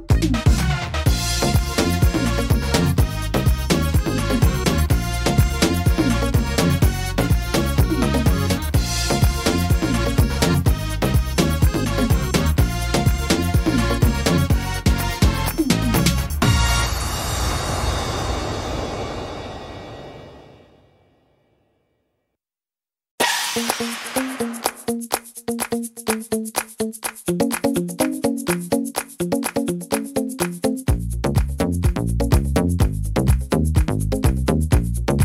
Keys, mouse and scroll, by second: 0.5 shift+middle click, 1.0-1.5 scroll up 4, 1.5 right click, 2.8 shift+right click, 3.7 click, 5.1 middle click, 6.3 click, 8.4 s, 10.7 click, 12.2 right click, 12.8 right click, 13.7 shift+right click, 13.7 shift+right click, 14.5 s, 16.5 shift+middle click, 17.0-17.9 scroll down 2, 17.5 middle click, 18.0 shift+middle click, 18.4 scroll up 1, 18.8 middle click, 19.7 shift+middle click, 20.2-20.6 scroll up 3, 20.6 shift+middle click, 21.3 middle click, 21.6-22.5 scroll down 1, 22.6 shift+middle click, 23.5 right click, 24.4 click, 26.1 click, 27.3 right click, 28.0 click, 29.4 click, 30.8 right click, 31.7 click, 34.2 click.